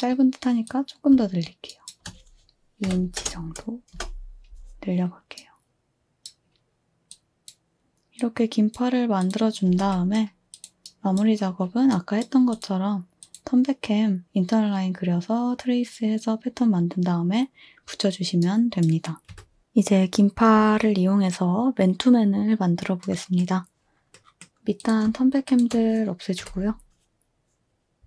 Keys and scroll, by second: 2.9 2, 3.2 Return, 3.9 space, 9.7 space, 19.3 2, 24.5 a, 26.4 Delete.